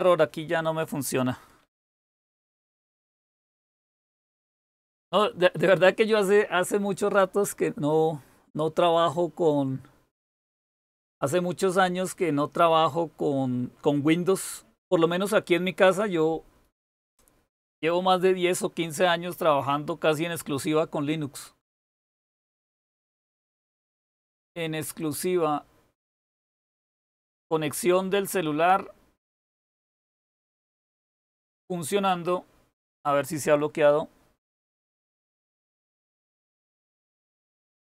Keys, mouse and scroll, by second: 1.7-2.9 typing, 3.0 Return.